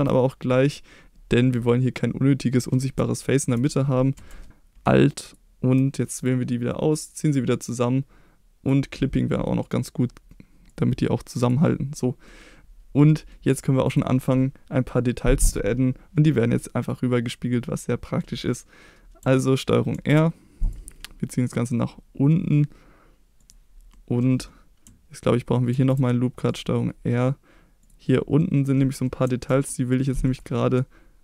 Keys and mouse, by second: 3.1 shift+middle click, 4.1 2, 5.2 alt+click, 6.9-8.6 drag, 9.6 click, 10.7 click, 11.9 middle click, 13.0 middle click, 13.8 click, 16.6 middle click, 17.9 middle click, 19.9 ctrl+r, 23.4 click, 23.9 middle click, 25.7 ctrl+r, 27.8 click, 28.1 middle click, 29.0 middle click, 29.4 ctrl+r.